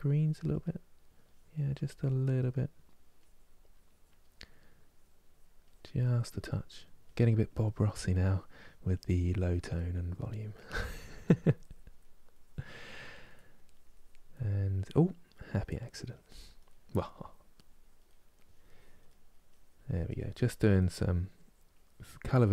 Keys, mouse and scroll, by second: 0.3 middle click, 1.0-2.2 drag, 2.2 middle click, 2.9-4.1 drag, 4.1 middle click, 4.7-6.2 drag, 6.2 middle click, 6.8-9.5 drag, 9.5 middle click, 10.3 click, 10.8 middle click, 11.3 click, 11.7 middle click, 12.1 click, 13.1 middle click, 13.4 click, 14.1 middle click, 14.5 click, 15.0 middle click, 15.8 click, 16.4 middle click, 16.9 click, 17.8 middle click, 18.3 click, 18.8 middle click, 19.2-20.5 drag, 20.5 middle click, 21.0 click, 21.8 middle click, 22.3 click.